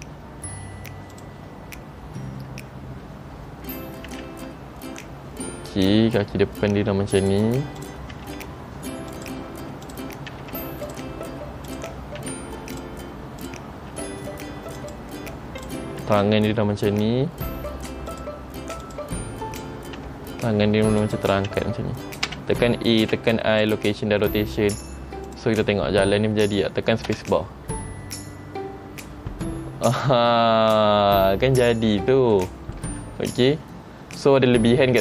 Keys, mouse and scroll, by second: 0.0-0.5 scroll up 1, 1.3 click, 4.2 r, 8.0 click, 8.3 r, 10.0 click, 10.5 r, 11.8 click, 12.3 r, 13.6 click, 14.1 r, 15.8 click, 16.2 r, 20.2 r, 22.4 a, 23.2 i, 25.4 click, 25.9-26.7 scroll down 7, 27.3-28.5 scroll down 1, 27.3 space, 30.1 space, 31.7-32.0 scroll up 3, 32.6 shift+middle click, 33.4 space.